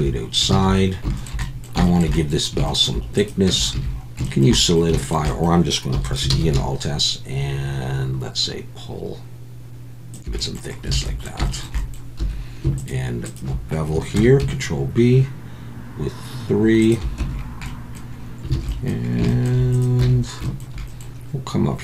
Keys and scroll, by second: 0.6 a, 3.5 Tab, 3.7 a, 5.9 e, 6.3 alt+s, 10.9 alt+a, 12.2 2, 14.2 ctrl+b, 17.2 Tab, 18.5 alt+a, 20.0 Tab.